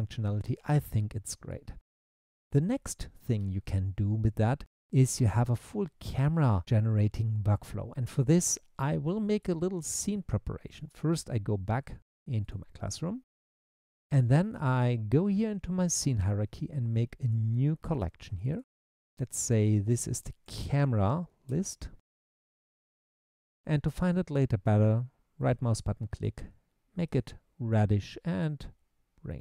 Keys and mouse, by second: 12.4 click, 15.3 click, 17.4 click, 18.4 click, 18.7-23.5 drag, 25.4-27.3 right drag, 28.4 click.